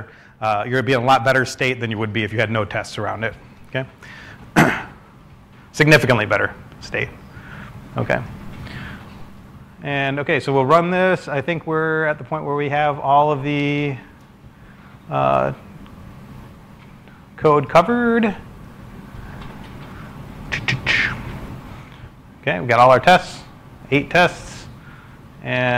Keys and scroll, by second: 1.1-2.5 typing.